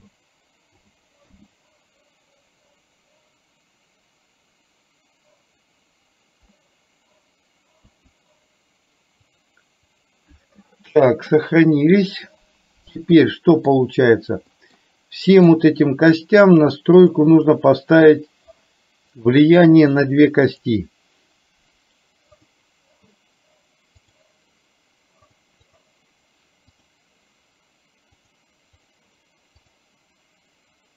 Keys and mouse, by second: 13.1-13.8 middle drag, 14.6 middle drag, 15.4 click, 16.6 click, 17.1 click, 19.2 click, 20.6 click, 22.4 click, 24.1 click, 25.7 click, 26.8 click, 29.7 click.